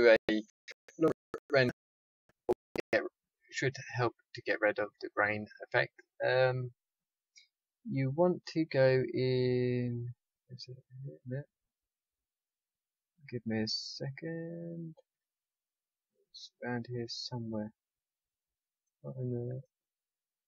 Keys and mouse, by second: 3.0-20.4 drag.